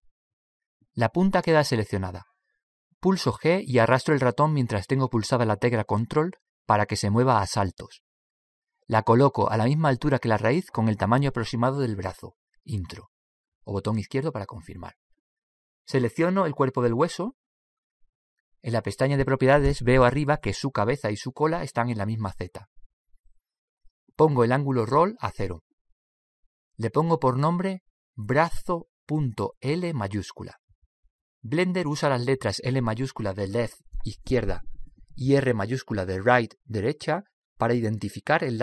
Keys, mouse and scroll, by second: 3.0-4.8 middle drag, 4.0 g, 17.5-25.4 right drag, 27.7-32.6 drag.